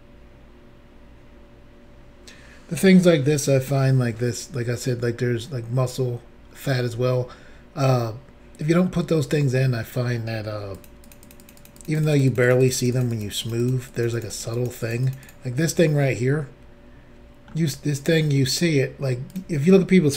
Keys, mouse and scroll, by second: 6.5-6.9 scroll up 1, 7.2 scroll down 2, 8.8 middle click, 10.7 shift+click, 11.1 shift+double click, 11.2 shift+click, 11.5 shift+double click, 11.6 shift+click, 11.6 shift+click, 11.8 shift+click, 11.8 shift+double click, 11.9 shift+click, 12.0 shift+click, 12.1 shift+click, 12.2 shift+double click, 12.3 shift+click, 12.3 shift+click, 12.4 shift+click, 12.5 shift+double click, 12.6 shift+click, 12.7 shift+click, 12.7 shift+click, 12.8 shift+double click, 12.9 shift+click, 13.0 shift+click, 13.1 shift+click, 13.2 shift+double click, 13.4 shift+click, 13.5 shift+click, 13.6 shift+click, 13.7 shift+double click, 13.9 shift+click, 14.0 shift+click, 14.1 shift+click, 14.2 shift+double click, 14.3 shift+click, 14.4 shift+click, 14.5 shift+click, 14.6 shift+double click, 14.8 shift+click, 14.9 shift+click, 15.0 shift+click, 15.1 shift+double click, 15.2 shift+click, 15.3 shift+click, 16.0 middle click, 19.3 click.